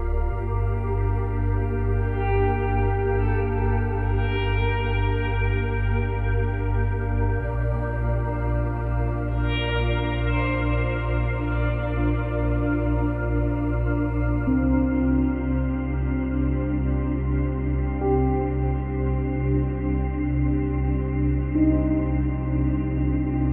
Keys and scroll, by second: 14.3 space, 15.1 space, 17.5 space, 18.3 space, 20.2 space, 21.0 space.